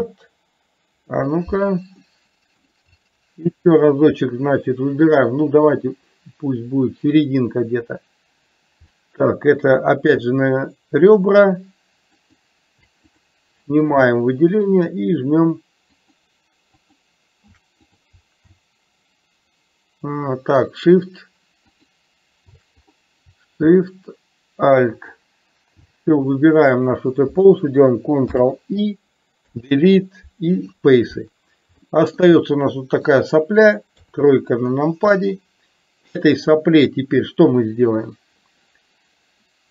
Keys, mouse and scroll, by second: 2.0 middle click, 2.9 shift+c, 9.8 click, 10.2 shift+c, 12.3 click, 13.2 click, 14.2 shift+c, 20.8 click, 21.8 click, 23.8 shift+a, 25.0 shift+click, 28.4 ctrl+i, 29.5 Delete, 31.9 shift+middle click, 32.5 middle click, 34.0 KP_3, 36.2-38.4 drag.